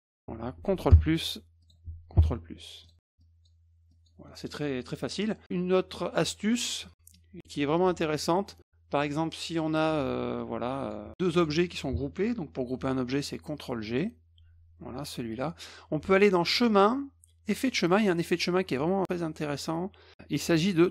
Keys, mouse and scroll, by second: 1.6 click, 2.8 click, 3.2 click, 3.9 click, 4.3 middle click, 6.1-8.5 drag, 9.5 ctrl+shift+click, 10.3 F1, 10.6 click, 10.7-11.0 drag, 11.1-11.4 drag, 13.9 click, 15.3 click, 16.5 click, 17.7 click.